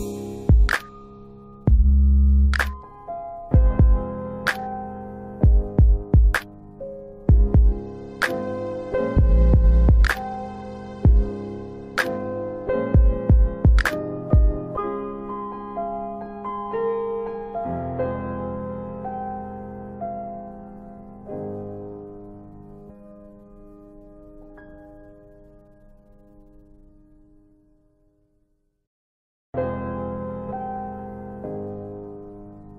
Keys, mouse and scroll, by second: 0.7 click, 1.5 ctrl+click, 4.2 middle click, 6.0 ctrl+click, 11.8-12.3 scroll down 1, 12.3 middle click, 14.6-15.8 scroll up 1, 15.8 middle click, 17.9 click, 23.2 click, 28.8 middle click, 29.2-29.6 scroll down 2, 30.4 click, 31.3-31.6 scroll up 1, 32.0-32.5 scroll down 2, 32.6 ctrl+alt+middle click.